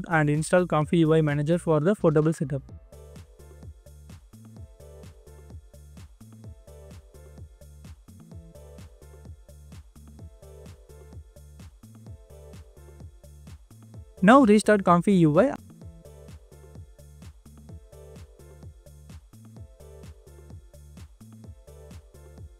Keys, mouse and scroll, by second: 20.4 double click.